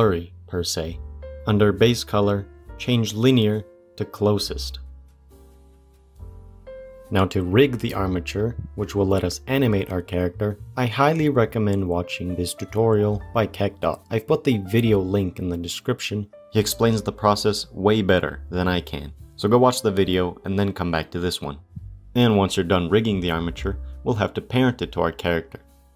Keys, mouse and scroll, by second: 3.6-5.4 drag, 22.5 click, 25.2 click.